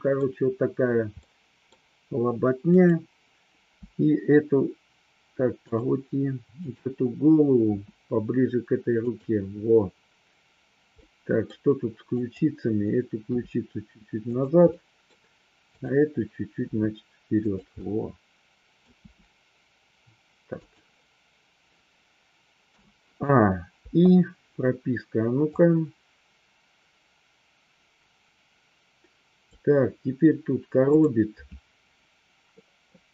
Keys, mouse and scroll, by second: 1.2 scroll up 1, 1.3 middle click, 3.7 r, 5.6 click, 6.6 click, 7.6 r, 11.0-11.5 middle drag, 12.2-12.6 drag, 13.3 r, 14.3-14.7 drag, 14.7 middle click, 16.6 r, 17.3 click, 17.8 middle click, 18.7 scroll down 1, 19.0 r, 22.6 a, 23.8 i, 25.5-29.5 drag, 30.8 click, 32.5 middle click.